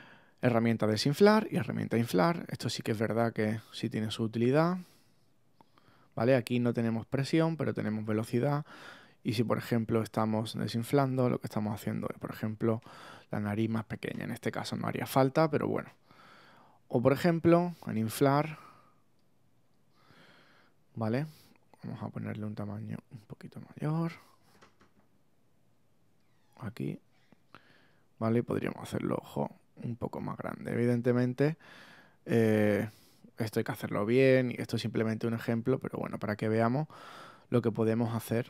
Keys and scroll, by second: 14.0 super+z.